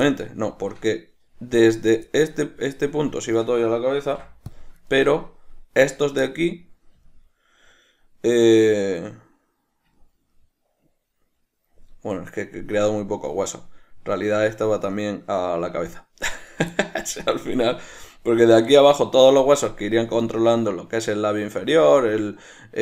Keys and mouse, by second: 0.2-1.9 middle drag, 1.9 right click, 2.2-3.4 middle drag, 3.4 shift+right click, 4.2 ctrl+p, 5.0 ctrl+middle click, 6.0 right click, 6.4-16.5 middle drag, 16.5 shift+right click, 16.9 middle click, 17.6 shift+right click, 18.0-22.8 middle drag.